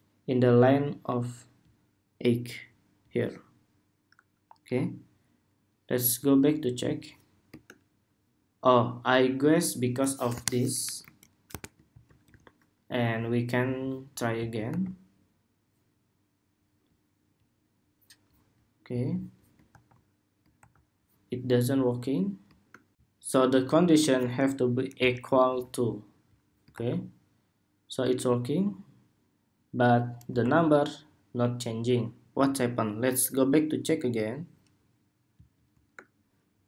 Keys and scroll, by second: 11.6 super+s, 12.1 super+Tab, 14.4 super+r, 19.4 super+r, 20.3 super+r, 25.2 super+s, 26.4 super+r, 30.1 super+r.